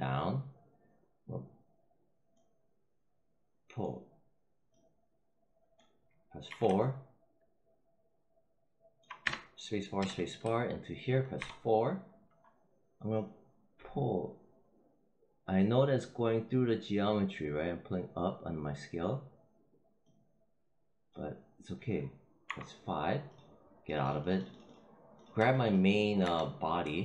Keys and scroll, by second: 6.4 4, 9.1 space, 11.2 4, 22.3 5, 26.1 w.